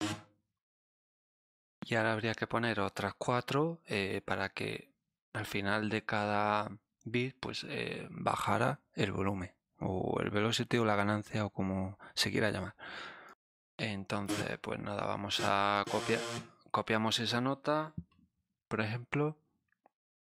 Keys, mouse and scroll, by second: 1.3 click, 13.2 click, 14.2 click, 15.3 click, 15.8 click.